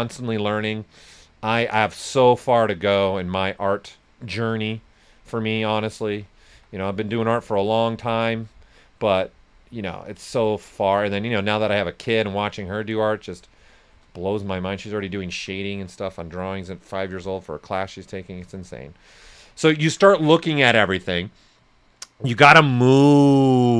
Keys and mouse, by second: 2.1 click, 5.5 shift+click, 6.5 s, 6.5-15.0 drag, 15.0 right click, 16.5 ctrl+z, 17.4-18.8 shift+drag, 18.8 right click.